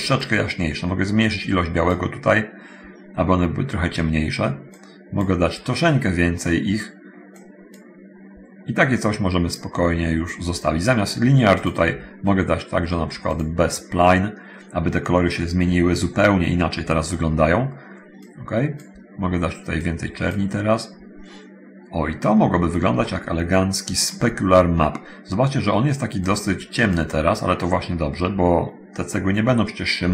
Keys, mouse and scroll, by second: 0.4-2.2 middle drag, 4.9 middle click, 7.5 middle click, 9.7 middle click, 11.7 click, 13.5 click, 18.4 click, 20.0 click, 23.2-24.5 shift+middle drag, 26.3 click.